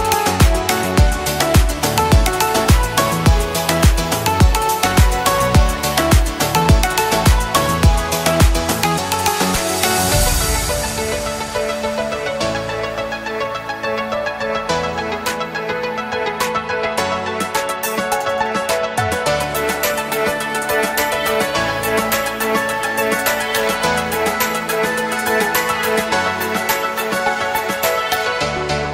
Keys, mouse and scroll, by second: 3.3 click, 7.9-8.5 scroll up 1, 8.5 click, 8.8-9.4 scroll down 1, 9.4 click, 9.7-10.1 scroll down 1, 10.1 click, 11.2-11.6 scroll down 1, 11.6 click, 12.8-13.7 scroll down 1, 13.7 click, 15.7 click, 21.2 click, 22.7 click.